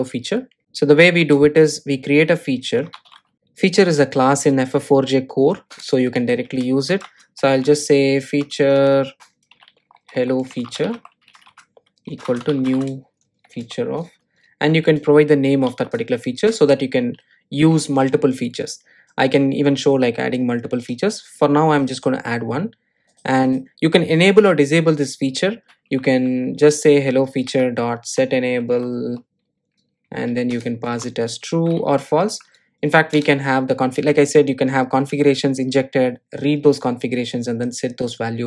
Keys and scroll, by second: 6.2 Return, 14.3 Return, 27.1 Return.